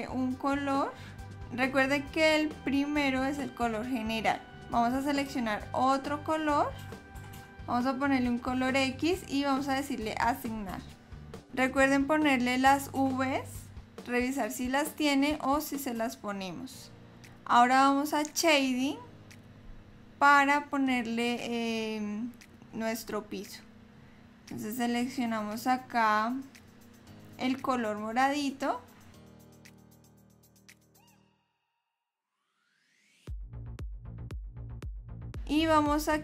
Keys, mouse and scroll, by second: 0.0 click, 1.0-1.3 scroll up 4.